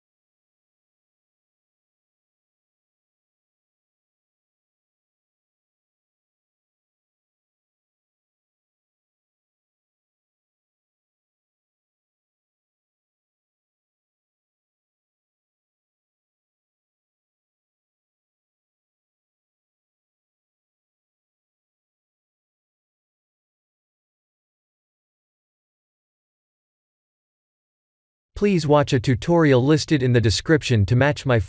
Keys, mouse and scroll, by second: 0.4 Tab, 1.4 ctrl+r, 3.8 ctrl+r, 6.4 ctrl+z, 7.5 scroll up 3, 8.0 shift+middle click, 8.8-9.7 scroll up 4, 9.7 ctrl+z, 10.5 alt+click, 11.7 ctrl+b, 18.1 Tab, 19.2-20.7 scroll down 9, 20.8 shift+middle click, 21.7 click, 22.1 shift+a, 24.6 s, 26.2 g, 27.8 ctrl+z, 28.7 g, 30.6 g.